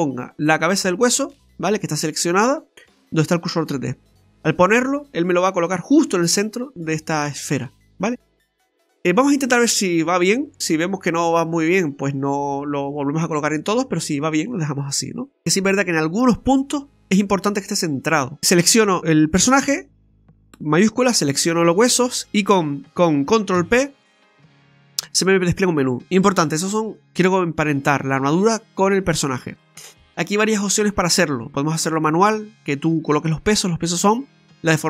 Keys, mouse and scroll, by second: 7.7-8.6 scroll down 5, 8.7 shift+middle click, 10.6 middle click, 14.0 scroll down 1, 14.2 middle click, 14.6 shift+middle click, 14.7 shift+middle click, 15.4 scroll up 3, 18.3-19.0 scroll down 1, 20.9 shift+right click, 23.5 ctrl+p.